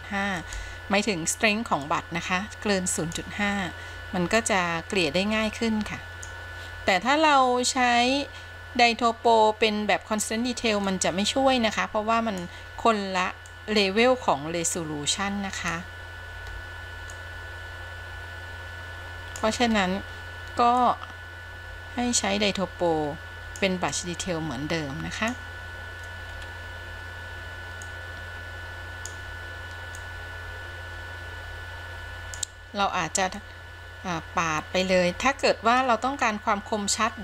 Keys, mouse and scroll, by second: 0.6 f, 2.0-3.3 drag, 4.6-6.5 drag, 7.5-10.4 drag, 11.0-12.6 drag, 13.7-16.1 drag, 17.3-19.7 drag, 21.0-23.8 drag, 24.2-25.7 drag, 26.5-27.4 scroll up 2, 28.0-29.3 drag, 30.2-32.6 drag, 33.6-36.0 drag, 36.3 scroll down 3.